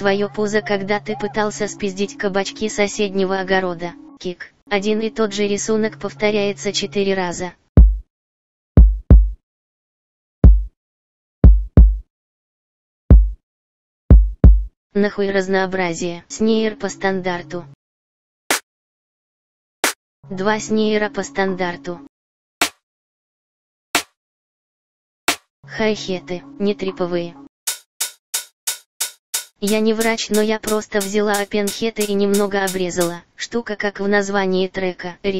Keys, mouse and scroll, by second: 16.2 F1, 20.2 F1, 25.8 click, 26.0 F1.